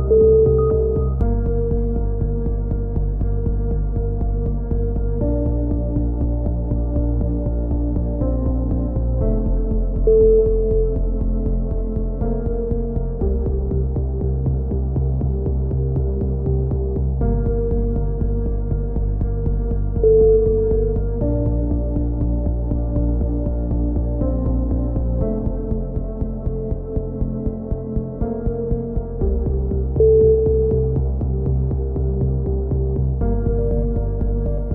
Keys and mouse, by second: 0.5 right click, 1.0 s, 1.3 middle click, 4.2 a, 5.2 click, 5.8 z, 6.7 z, 7.0 z, 8.5-9.5 drag, 13.7 click, 14.2 z, 15.4 z, 18.7 click, 19.7-21.5 middle drag, 22.0 click, 23.0 middle click, 24.3 b, 26.0 click, 27.2-28.6 drag, 29.2 a, 29.7 click, 30.6 middle click, 32.0 middle click, 32.4 ctrl+z, 32.8 ctrl+z, 33.4 b.